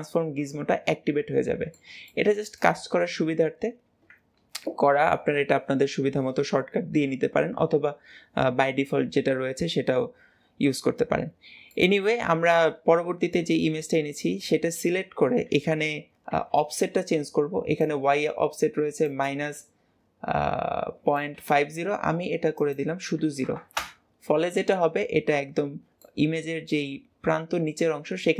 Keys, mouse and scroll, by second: 3.1-3.5 scroll up 2, 11.6-15.9 shift+middle drag, 22.5-24.9 drag, 24.9-26.2 middle drag, 26.2-28.3 scroll down 2.